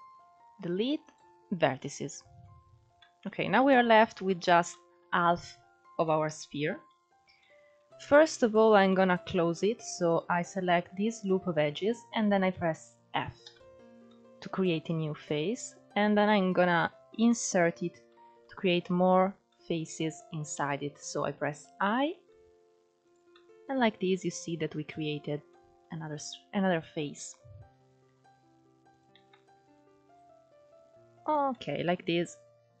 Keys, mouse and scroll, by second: 1.9 Tab, 2.5 scroll down 3, 2.6-3.2 middle drag, 3.2 alt+z, 3.4-3.9 scroll up 2, 3.9 shift+middle drag, 4.2 scroll down 1, 4.4-6.4 middle drag, 6.4 Tab, 6.8 scroll up 1, 7.1-8.2 middle drag, 8.2 ctrl+2, 8.6-9.7 middle drag, 9.7 click, 10.3 alt+shift+click, 13.1 f, 13.7-16.8 middle drag, 17.0-21.8 middle drag, 23.0 middle click, 23.7-24.9 scroll up 1, 24.9 scroll down 1, 25.2 middle click, 25.6-27.3 scroll up 1, 27.3 i, 28.8 i, 31.2-32.8 middle drag.